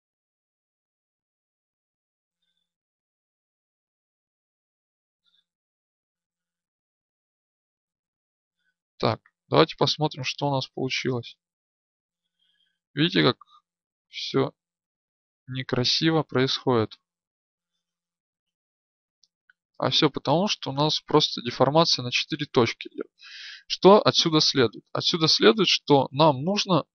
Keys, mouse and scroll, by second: 0.2 a, 5.9 ctrl+p, 10.7 right click, 11.2-13.2 drag, 15.2 ctrl+z, 16.4-18.5 drag, 21.6 ctrl+z, 24.6 right click.